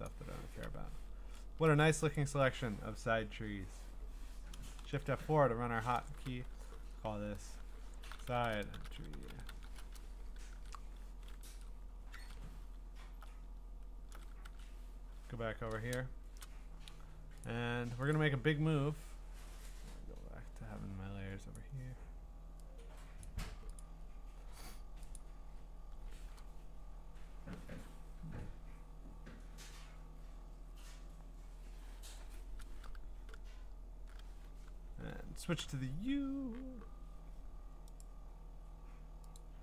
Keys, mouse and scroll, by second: 2.2 ctrl+click, 4.8 F4, 7.8-10.0 typing, 10.5 ctrl+Tab, 11.5 ctrl+Tab, 12.1 ctrl+Tab, 12.8 scroll, 13.5-14.4 ctrl+scroll, 14.4 ctrl+Tab, 15.2-16.8 scroll, 17.4 click, 18.1 click, 21.5 click, 23.2 click, 23.8 click, 24.3-25.1 scroll, 25.1 click, 25.3-26.2 scroll, 35.6 u, 38.0 right click, 39.4 click.